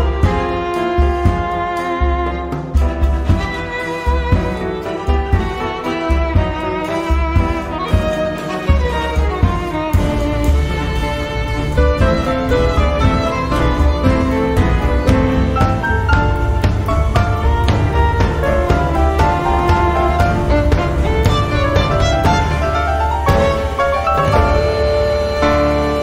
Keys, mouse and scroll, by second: 0.3-0.7 scroll down 2, 1.2 click, 1.6-1.9 scroll up 2, 2.2 scroll down 2, 3.6 click, 6.0 click, 7.1 9, 7.4 0, 8.2 click, 8.9-10.5 typing, 11.3-13.3 drag, 14.1-15.7 drag, 16.3 click, 17.4-19.2 drag, 19.7-21.0 drag, 21.9 click, 23.8 click, 24.7-25.1 scroll up 1, 25.9 scroll down 1.